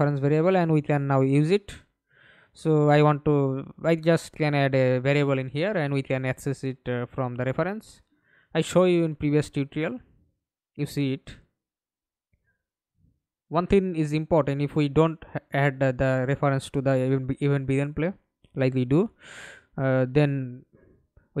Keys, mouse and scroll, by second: 0.8 double click, 6.3-12.0 typing, 19.5-19.9 scroll down 2, 20.3 right click, 21.0-21.4 scroll down 3.